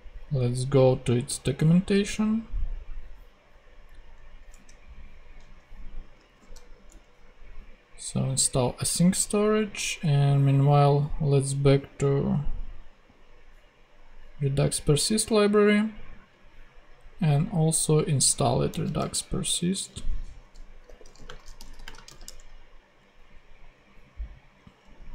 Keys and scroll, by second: 4.5 super+Tab, 6.2 super+v, 6.8 super+Return, 7.3 Return, 18.7 super+c, 18.9 super+Tab, 20.8 super+y, 21.0-22.0 typing, 22.2 super+Return.